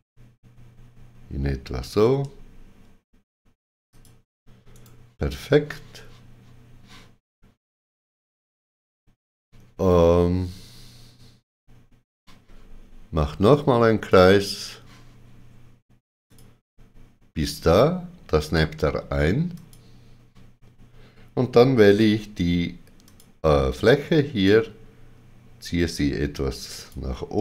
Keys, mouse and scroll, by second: 3.9 ctrl+click, 4.7 right click, 14.1 ctrl+click, 14.1 right click, 16.2 click, 19.5 click, 21.8 3, 23.0 3, 23.0 click, 24.4 click.